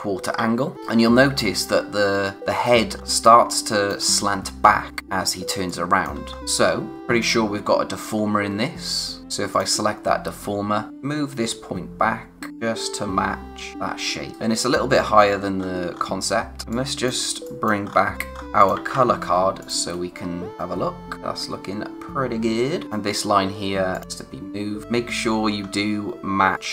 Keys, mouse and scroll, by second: 1.1 scroll up 1, 2.8 scroll down 1, 3.0 space, 3.2 click, 3.5 space, 5.5 space, 5.6 click, 6.0 space, 6.3 scroll up 1, 6.4 click, 9.2 click, 10.0-10.3 scroll up 1, 10.9 click, 14.3 click, 16.6 space, 16.7 click, 17.0 space, 17.4 click, 17.8-18.5 scroll up 1, 18.5-19.4 typing, 18.5 click, 19.6 click, 21.2-21.9 scroll down 1, 22.8 click, 24.8-25.5 scroll up 1, 25.5-26.5 scroll down 1, 26.5 click.